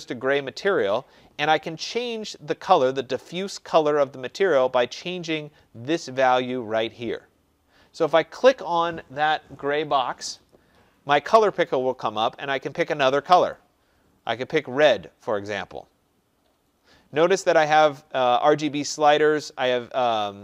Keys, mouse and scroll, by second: 10.4 click, 13.5 click.